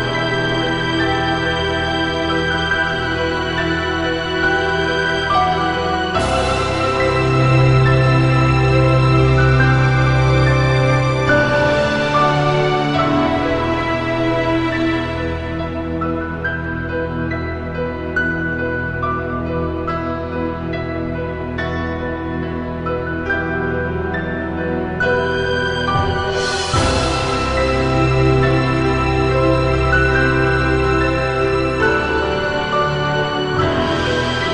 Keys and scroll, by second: 26.8 -, 28.5 +, 29.7 b.